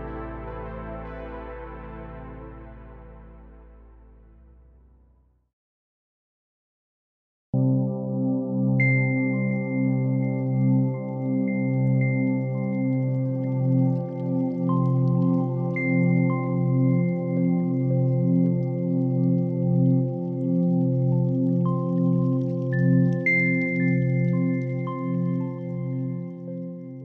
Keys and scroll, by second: 0.0 s, 6.0 h, 6.5 super+s.